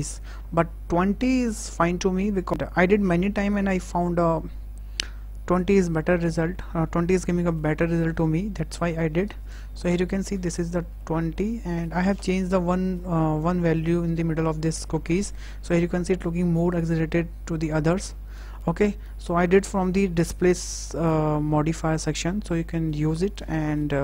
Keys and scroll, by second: 9.4 Tab.